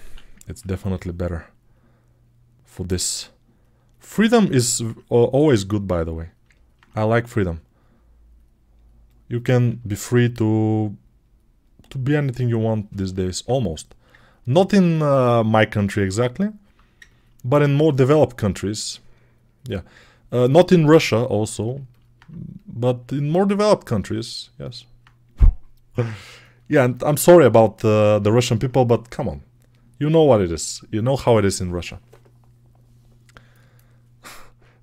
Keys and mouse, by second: 0.7 g, 13.2-16.3 alt+right drag, 19.9-23.9 alt+right drag, 23.9-34.8 alt+drag.